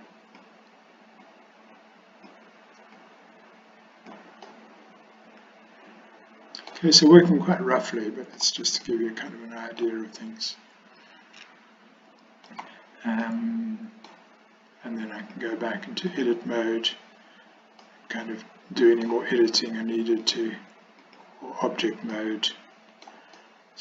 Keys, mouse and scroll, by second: 1.3-2.4 drag, 3.0-4.2 drag, 4.6-6.8 middle drag, 7.6 middle click, 8.9-9.9 shift+middle drag, 10.2-12.5 middle drag, 13.5 middle click, 15.3-16.4 drag, 17.9-19.1 middle drag, 20.4-21.3 drag, 22.2-23.1 shift+middle drag, 23.4-23.8 middle drag.